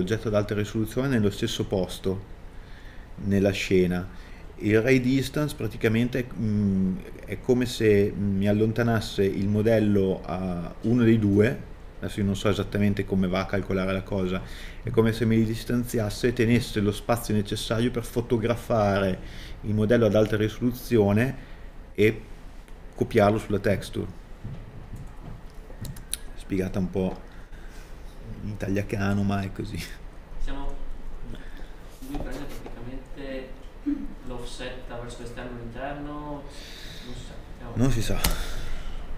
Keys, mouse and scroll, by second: 26.2 click.